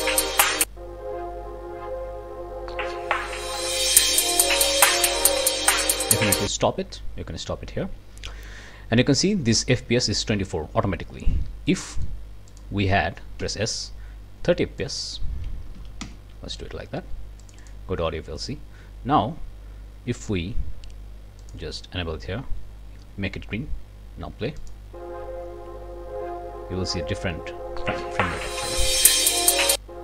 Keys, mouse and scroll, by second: 6.3 click, 11.0-11.7 scroll up 2, 11.7 click, 12.5 click, 13.4 s, 14.8 click, 15.7 3, 15.8 KP_0, 16.0 KP_Enter, 17.4 click, 18.1-21.7 drag, 24.6 click.